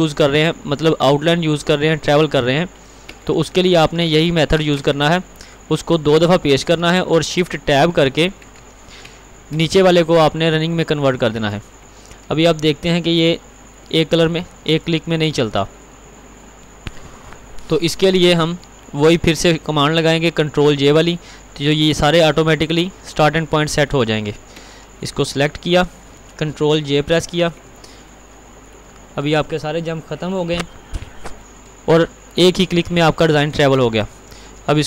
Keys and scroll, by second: 2.5 ctrl+t, 3.9 ctrl+x, 4.2 ctrl+v, 7.3 ctrl+t, 8.7 ctrl+v, 27.1 ctrl+j.